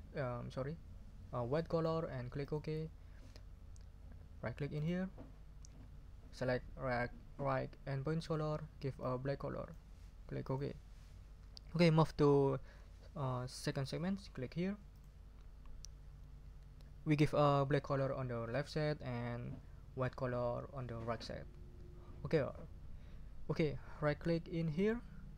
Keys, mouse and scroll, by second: 2.4 click, 4.7 right click, 8.2 click, 9.0-9.9 drag, 10.4 click, 14.9 click, 24.8 right click.